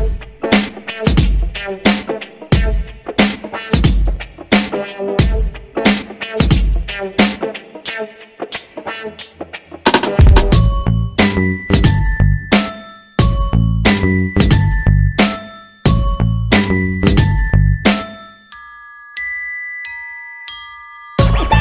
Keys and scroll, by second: 5.0 ctrl+0, 7.1 space.